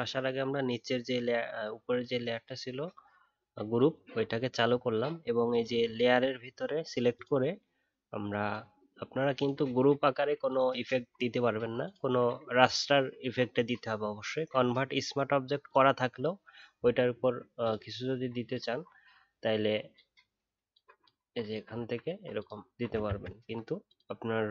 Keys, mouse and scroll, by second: 23.0 ctrl+z.